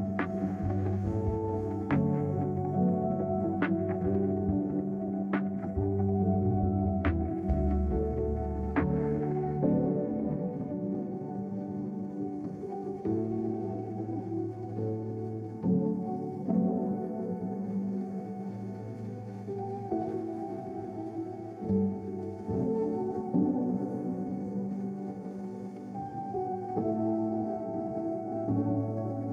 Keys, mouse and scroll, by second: 0.0-0.8 scroll down 2, 14.1 middle click, 15.3 middle click, 16.8-17.8 typing, 18.2 Return, 24.5 ctrl+super+t.